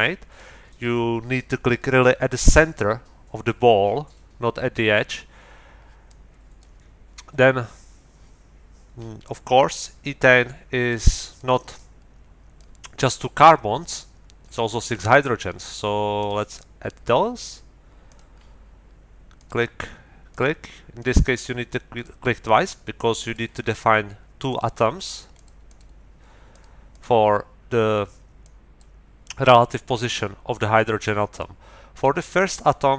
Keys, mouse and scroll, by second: 6.1 click, 9.2-11.1 drag, 11.3 click, 12.5 click, 16.2 click, 18.1 click, 19.3 click, 20.3 middle click, 21.0-22.2 middle drag, 22.4-23.5 middle drag, 23.7 middle click, 24.5 click, 25.0 click, 25.3 middle click, 25.4 click, 26.5 click, 26.9 click, 28.4 click, 29.9 click, 31.9 middle click, 32.3 click.